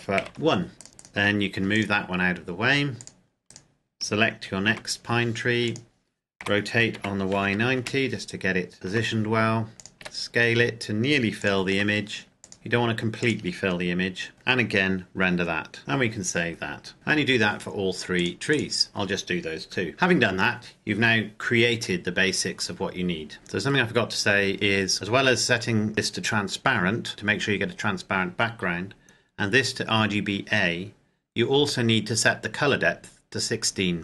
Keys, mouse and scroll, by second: 0.0-0.2 typing, 0.8 click, 1.3 g, 1.7 click, 2.3-2.9 scroll down 1, 2.9 click, 3.5 right click, 4.7 g, 5.7 click, 6.4 r, 7.0 y, 7.3 KP_9, 7.7 KP_Enter, 8.4-8.9 scroll up 1, 8.9 g, 9.7 click, 10.0 s, 11.4 click, 11.7 g, 12.4 click, 12.5 s, 13.2 click, 15.8 click, 16.9 2, 18.2 click, 19.9 Escape, 22.0-22.5 scroll down 1, 23.3 click, 33.8 click.